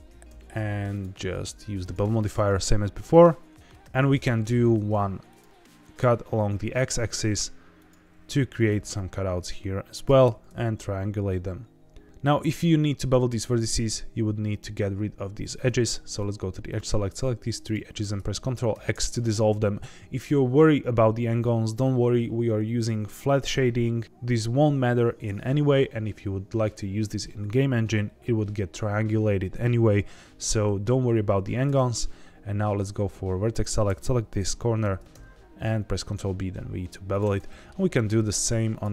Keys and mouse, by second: 0.0 g, 0.9 click, 0.9 g, 1.7 click, 2.0 g, 2.1 g, 2.9 click, 3.8 ctrl+r, 6.7 right click, 7.7 click, 8.4 ctrl+b, 8.6 v, 9.9 click, 10.2 ctrl+t, 12.0 ctrl+z, 15.8 2, 16.6 click, 17.0 shift+click, 17.6 shift+click, 18.7 ctrl+x, 31.6 1, 33.4 click, 34.8 ctrl+b, 35.1 v, 37.1 click, 37.3 middle click, 38.0 2, 38.7 shift+click.